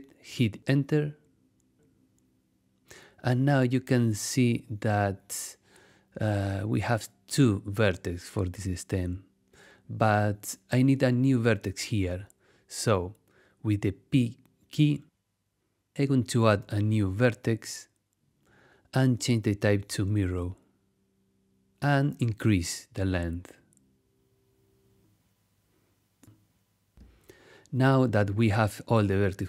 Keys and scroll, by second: 1.3 Return, 13.8 p, 17.0 v.